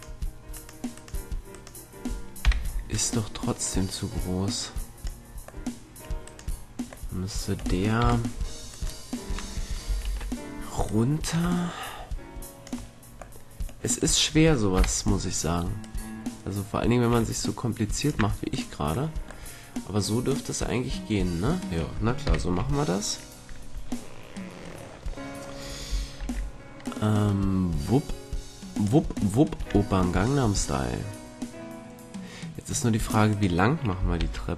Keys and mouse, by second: 0.0 middle click, 0.7-3.5 right drag, 2.6 KP_3, 3.5 middle click, 3.8-5.4 drag, 6.4-8.2 middle drag, 8.1 KP_3, 8.8-11.0 right drag, 10.2 ctrl+l, 12.7 click, 13.5-15.4 middle drag, 14.9 KP_3, 16.0-17.8 drag, 18.6 right click, 19.1 click, 20.5 middle click, 22.4 KP_3, 26.3 ctrl+l, 27.0-29.0 drag, 29.5 middle click, 30.4-32.8 drag, 33.1-34.3 right drag, 34.3 ctrl+l.